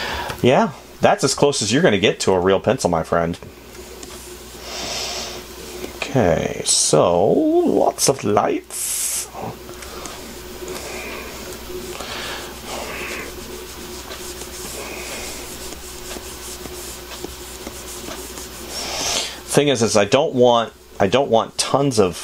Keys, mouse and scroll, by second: 1.7 space, 20.4 space.